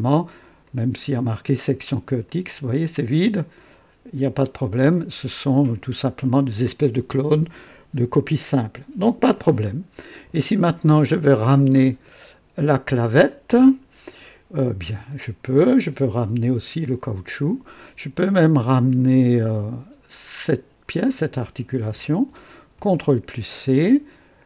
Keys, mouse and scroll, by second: 0.6 click, 2.2 click, 2.8 click, 5.5 scroll down 2, 12.0 click, 15.4 click, 17.2 ctrl+click, 20.5 ctrl+click, 22.8 ctrl+c.